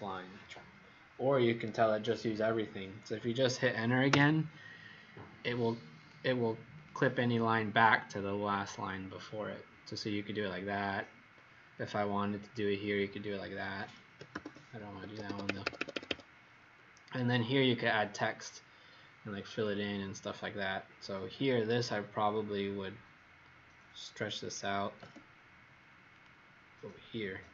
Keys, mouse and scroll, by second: 4.0 Return, 5.9 click, 12.4 click, 14.2 ctrl+z, 15.0 Escape, 15.2 Escape, 21.5 click, 24.8 s, 26.1 click.